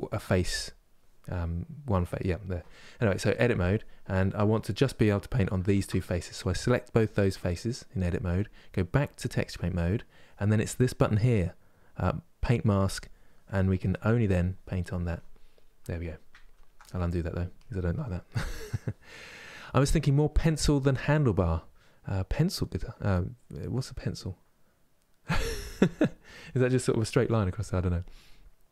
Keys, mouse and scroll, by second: 3.3 click, 5.4 shift+click, 9.0-12.7 drag, 16.1 ctrl+z, 17.3-28.7 drag.